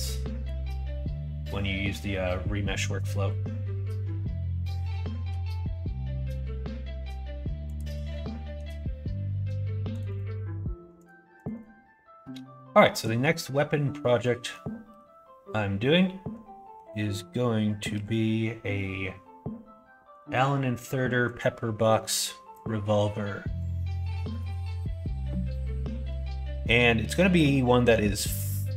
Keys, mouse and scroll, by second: 14.2 middle click, 14.8 KP_1, 17.9 KP_3, 24.2 click, 27.8 s.